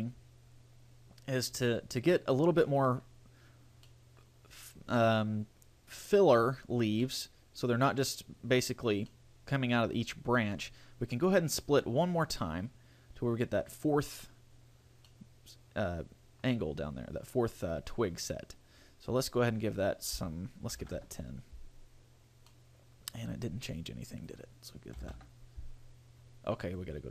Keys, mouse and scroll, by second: 2.3 middle click, 4.1 middle click, 7.2 middle click, 9.4 middle click, 12.4 click, 15.3 middle click, 19.4 click, 22.7 middle click, 24.4 click, 26.8 click.